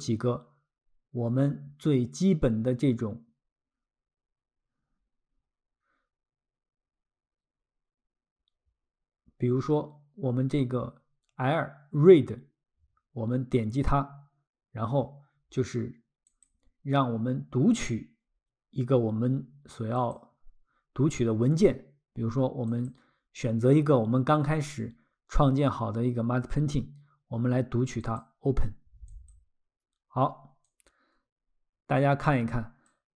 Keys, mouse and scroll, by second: 13.5 click, 16.3 click, 20.0 click, 22.7 click, 28.0 click, 30.7 click.